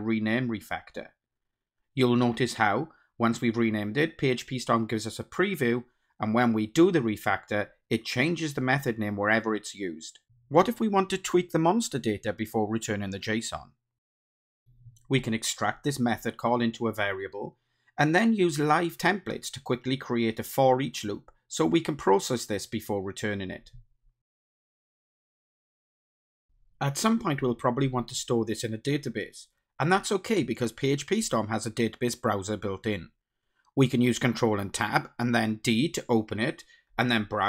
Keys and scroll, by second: 1.1 ctrl+alt+t, 12.5 alt+Up, 14.8 ctrl+alt+t, 22.8 Tab, 23.8 Return, 26.0 Return, 31.9 ctrl+Tab, 34.4 super+Down, 36.9 super+e.